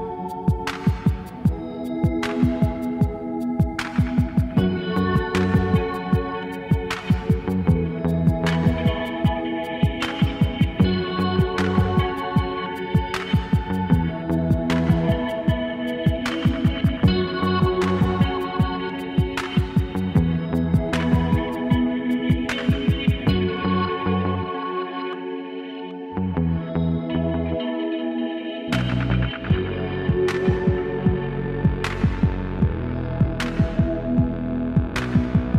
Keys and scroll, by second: 2.0 alt+z, 2.7 KP_7, 5.5 Caps_Lock, 13.8 ctrl+z, 15.6 e, 17.1 KP_7, 20.1 KP_1, 20.2 KP_Divide, 21.0 alt+z, 22.1 alt+z, 23.2 g, 24.0 g, 24.4 g, 27.6 g, 32.0 g, 32.6 g, 33.0 g, 33.3 g, 34.3 alt+z, 35.4 z.